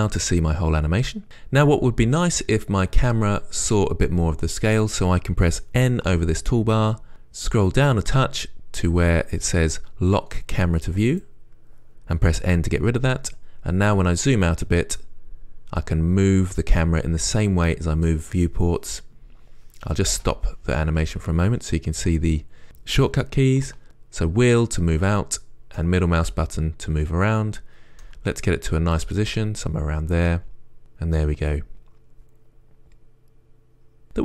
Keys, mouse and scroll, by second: 10.9 right click, 14.7 scroll down 2, 15.3-17.5 middle drag, 19.6 middle drag, 20.0 middle click, 20.4 space, 23.8 middle click, 24.4-29.2 middle drag, 24.4-24.8 scroll up 2, 24.8-26.1 scroll down 2, 29.2-34.2 right drag.